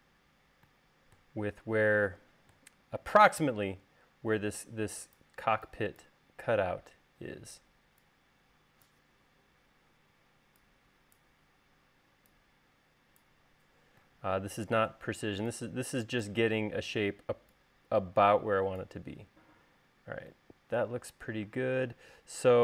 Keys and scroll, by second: 21.6 space.